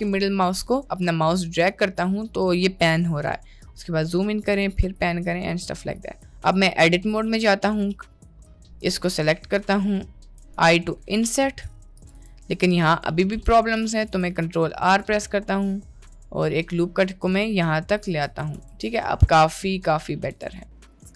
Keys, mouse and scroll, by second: 0.8-3.6 shift+middle drag, 4.3-4.9 shift+middle drag, 5.7 shift+middle click, 7.3 Tab, 8.5 middle click, 9.1 click, 10.5 i, 12.3 Tab, 13.5 Tab, 14.1 ctrl+r, 18.3 Tab, 18.5 Tab, 19.3-20.3 middle drag, 20.3 Tab, 21.0 Tab.